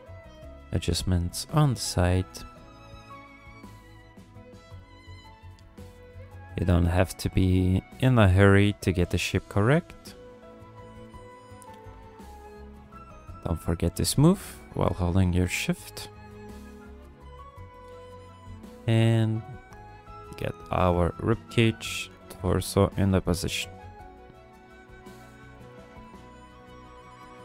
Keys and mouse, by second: 0.7 click, 1.9 click, 2.5 f, 3.0 click, 3.8 f, 4.7 click, 5.7 click, 6.5 f, 7.4 click, 8.3 f, 8.8 click, 9.7 f, 10.2 click, 11.0 f, 11.5 click, 12.1 shift+click, 12.5 shift+click, 13.2 click, 13.9 f, 14.5 click, 15.5 shift+click, 15.9 shift+click, 16.2 shift+click, 16.5 shift+click, 16.8 shift+click, 17.6 click, 18.6 f, 19.2 click, 19.7 click, 20.0 click, 20.3 click, 20.6 click, 21.1 ctrl+click, 21.4 click, 22.0 KP_1, 22.7 ctrl+click, 23.1 g, 23.4 f, 24.1 click, 25.0 f, 25.6 click, 26.7 click, 27.2-27.4 drag.